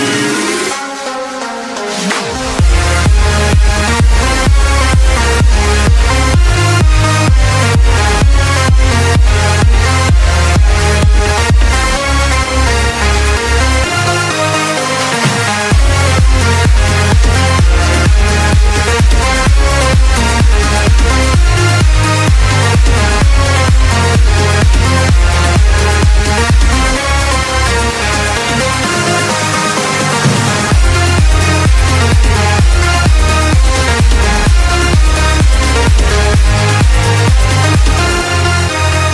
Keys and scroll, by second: 0.0-1.4 typing, 2.8 z, 5.5 space, 5.8 x, 8.3-10.6 typing, 9.1 ctrl+space, 9.3 ctrl+space, 12.6-19.6 typing, 21.6 space, 22.1 space, 22.6 space, 23.4 ctrl+space, 23.9 space, 24.3 z, 25.7-27.4 typing, 28.8 space, 29.1 space, 29.9 z, 31.1 x, 31.8 space, 32.3 space, 33.6 space, 34.2 z, 34.8 space, 35.4 space, 35.9 ctrl+0, 37.5 ctrl+space, 38.5 ctrl+z, 38.9 ctrl+space.